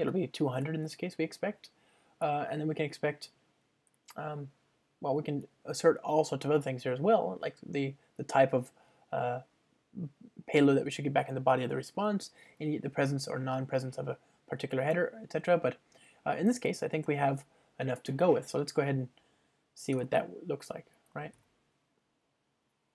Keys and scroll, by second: 20.2 super+BackSpace.